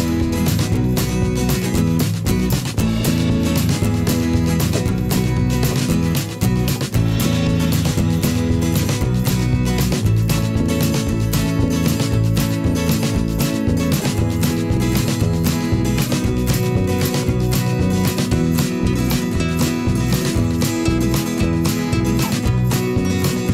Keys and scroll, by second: 16.6 ctrl+t, 21.2 Return.